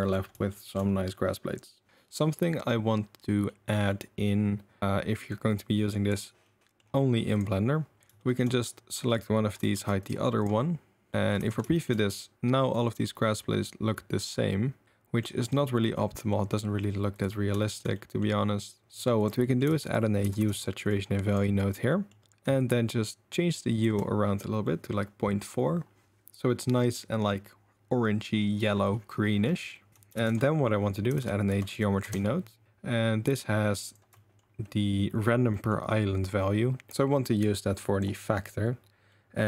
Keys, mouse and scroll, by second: 0.5 shift+middle drag, 3.5-3.9 drag, 5.3 click, 6.5 click, 8.2-9.6 shift+drag, 9.6 j, 9.8 h, 10.4 click, 11.5 ctrl+s, 11.7 shift+click, 15.4 click, 16.0 drag, 17.1 click, 17.6 shift+drag, 17.9 drag, 19.2 click, 19.4 click, 19.9 shift+a, 21.9 click, 21.9 middle click, 21.9 right click, 22.7-23.8 shift+drag, 24.6 click, 24.6 middle click, 24.6 right click, 29.4 click, 29.4 middle click, 29.4 right click, 29.9 middle click, 30.3 shift+a, 34.2 middle drag, 35.5 middle click, 36.4-38.0 drag, 39.1-39.4 middle drag.